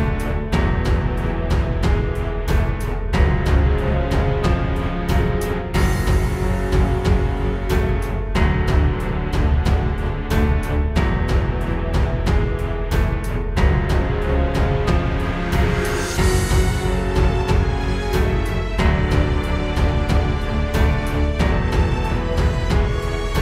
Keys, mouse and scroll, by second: 1.1 click, 3.2 space, 7.9 space, 8.5 right click, 10.5 click, 16.7 click, 20.0 click, 20.3 click, 22.4 shift+click.